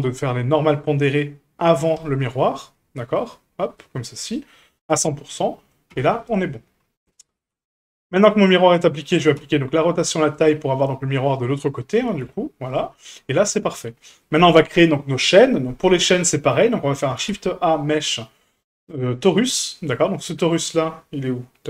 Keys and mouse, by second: 0.1-2.0 drag, 3.2-3.8 drag, 4.3 click, 5.5 middle drag, 5.9 a, 7.1 shift+middle drag, 8.9 right click, 9.4 q, 12.2 a, 13.0-14.2 middle drag, 16.2-16.5 middle drag, 17.2 shift+a.